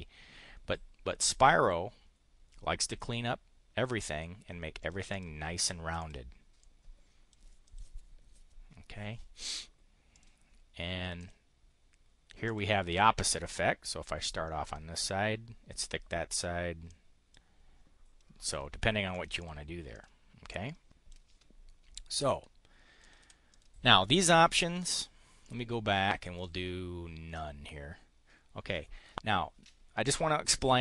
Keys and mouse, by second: 4.8 click, 5.1 click, 5.9 click, 6.6 click, 7.6 click, 10.1 click, 11.2 click, 12.5 click, 14.2 click, 16.8 click, 19.1 click, 19.4 click, 19.8 click, 20.4 click, 22.1 Delete, 23.0 click, 23.2 Delete, 23.4 click, 25.4 click, 26.3 click.